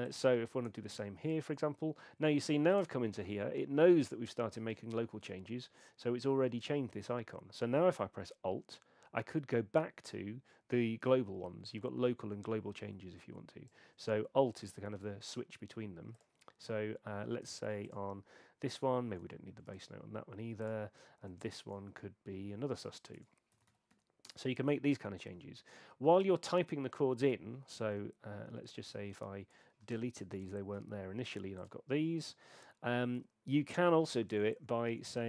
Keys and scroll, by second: 0.7 Return, 1.3 BackSpace, 14.9 Return, 18.6 Return, 19.1 BackSpace, 19.7 Return, 21.6 BackSpace, 23.3-24.4 typing, 29.1 shift+super+a, 29.9 shift+super+a, 30.4 BackSpace, 33.5 Return, 34.3 BackSpace.